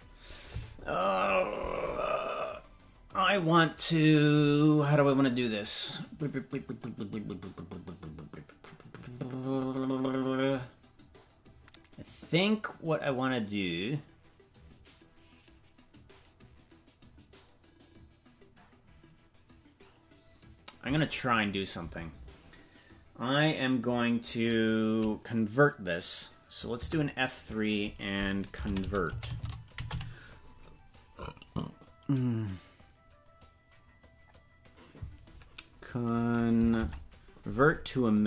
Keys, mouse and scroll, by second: 26.8 F3, 36.7 BackSpace.